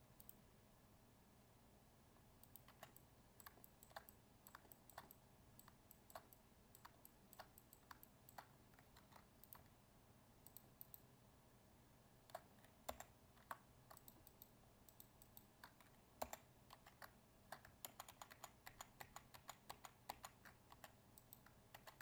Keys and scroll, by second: 8.9 ctrl+Tab, 17.8 ctrl+z.